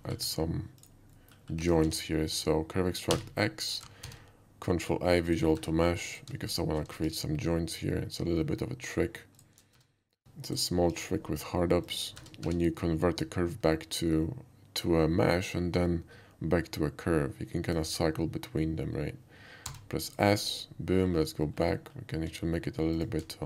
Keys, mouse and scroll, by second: 0.3 Tab, 0.8 click, 1.1 middle click, 1.8 q, 1.9 Tab, 2.4 click, 3.1 x, 4.0 ctrl+a, 5.2 click, 5.5 Tab, 6.1 click, 6.5 shift+click, 7.0 ctrl+shift+b, 8.2 shift+middle click, 9.4 shift+click, 9.7 Tab, 10.2 ctrl+z, 10.5 shift+click, 10.9 ctrl+shift+b, 11.9 shift+click, 12.2 Tab, 12.5 q, 13.7 Tab, 17.7 click, 19.7 s, 20.1 click, 20.4 middle drag, 20.7 /, 21.1 middle click, 21.6 middle click, 21.8 middle click, 22.2 q, 23.0 click.